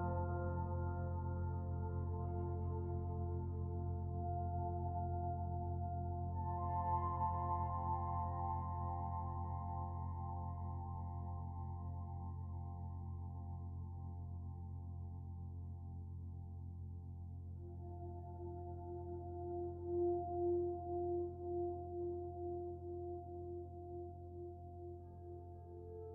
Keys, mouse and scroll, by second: 5.6 shift+middle click, 7.6 click, 9.1 click, 16.2 middle click, 16.9 shift+middle click, 18.1 middle click, 20.5 click, 22.9 click, 23.7 middle click, 25.8 click.